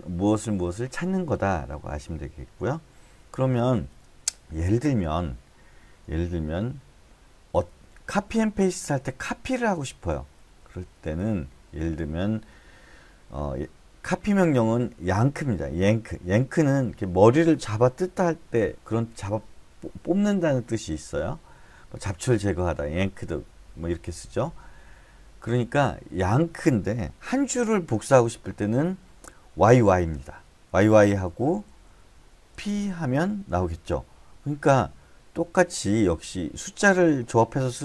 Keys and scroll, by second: 7.7-8.8 typing, 10.4 k, 10.6 k, 10.8 k, 11.0 k, 28.3 j, 28.6 j, 29.7 y, 29.9 y, 31.0-33.0 typing.